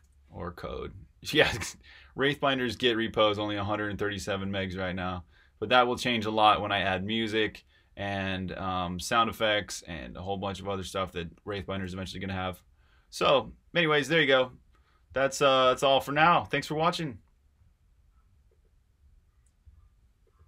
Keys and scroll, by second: 11.8 super+w, 14.1 super+w.